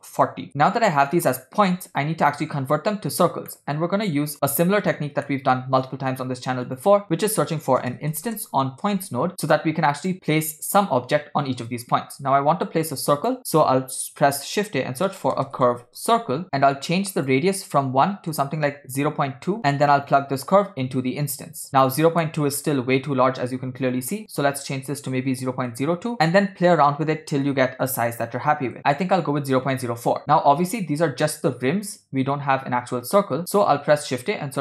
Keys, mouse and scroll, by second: 0.5 scroll down 5, 2.4-2.7 scroll up 2, 3.6 middle click, 4.1 click, 5.3 middle click, 6.0 shift+a, 12.0 middle click, 12.5 shift+a, 17.2-18.9 drag, 20.1-21.7 drag, 22.3 middle click, 22.6 scroll up 2, 24.3-25.8 drag, 25.4 0, 26.1-27.9 drag, 28.8 scroll up 1, 28.8 0, 33.6 middle click, 33.7 shift+a.